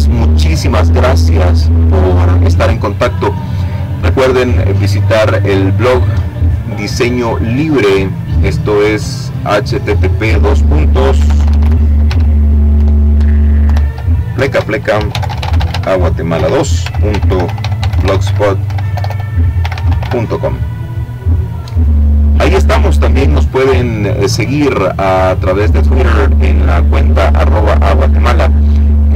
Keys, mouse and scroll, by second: 7.5 click, 8.3 click, 9.1-11.8 typing, 12.9-18.7 typing.